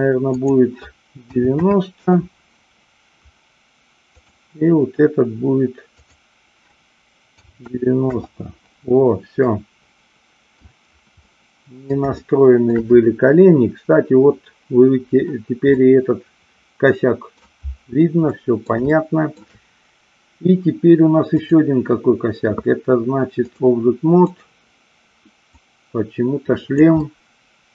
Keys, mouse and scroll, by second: 0.3-2.1 drag, 4.1-5.7 drag, 5.9-8.5 drag, 9.5-10.7 middle drag, 11.2-11.9 middle drag, 12.1-12.7 shift+middle drag, 15.7-17.3 middle drag, 18.2-18.6 middle drag, 18.9-19.3 shift+middle drag, 21.3-23.6 drag, 24.2 click, 25.6-26.8 drag, 26.9-27.7 middle drag.